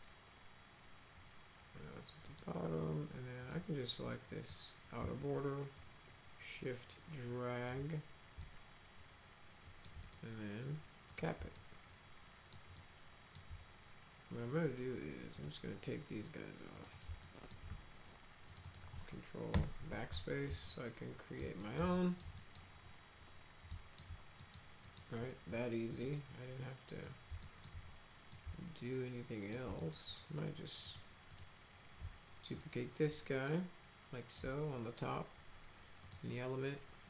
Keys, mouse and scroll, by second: 2.3 middle click, 3.4 click, 4.0 click, 5.8-7.7 shift+drag, 8.4-9.9 alt+middle drag, 10.0 right click, 11.1 click, 11.5 alt+middle click, 12.8 alt+middle click, 15.3 click, 16.8 click, 16.9 click, 17.2 alt+right click, 17.5 alt+middle click, 18.5 ctrl+click, 18.6 ctrl+click, 19.5 ctrl+BackSpace, 20.3 alt+middle click, 20.7 alt+middle click, 21.6 middle click, 22.0 alt+middle click, 22.4 right click, 23.7 alt+right click, 24.4 right click, 24.8 right click, 25.9 click, 27.0 click, 27.5 alt+middle click, 28.3-29.5 alt+middle drag, 29.8 middle click, 30.8 click, 31.3 click, 32.6-34.4 shift+drag, 36.0 click.